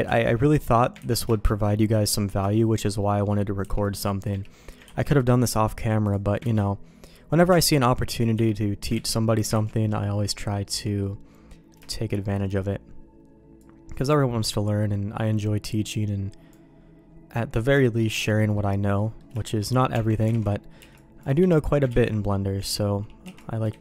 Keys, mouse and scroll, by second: 0.0 ctrl+q, 0.5 middle click, 1.0 ctrl+x, 1.3 shift+middle click, 2.1 middle click, 2.5 shift+middle click, 3.0 middle click, 3.6 c, 4.8 ctrl+q, 6.0 click, 6.4 ctrl+x, 7.5 c, 8.9 ctrl+q, 9.5 ctrl+x, 9.7 middle click, 10.4 middle click, 10.7 Tab, 11.0 middle click, 11.9 shift+middle click, 12.3 middle click, 13.6-16.5 drag, 17.3 middle click, 17.8 shift+middle click, 18.3 middle click, 19.0 middle click, 19.4 shift+middle click, 19.9 Tab, 20.3 alt+a, 20.8 c, 21.9 ctrl+q, 22.6 ctrl+x, 23.2 c.